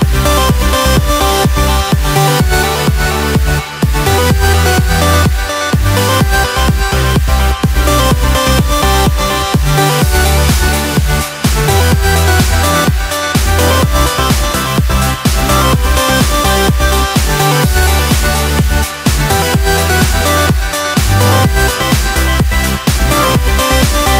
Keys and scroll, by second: 0.0 Return, 0.2 Escape, 0.3 alt+a, 0.4 Escape, 3.7 Return, 10.7 BackSpace, 13.4 Return, 18.1 Escape, 19.3 Caps_Lock.